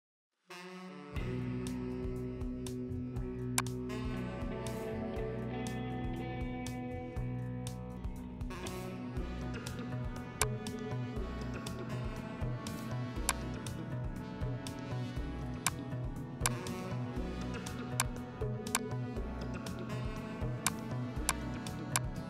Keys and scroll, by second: 1.4 ctrl+t.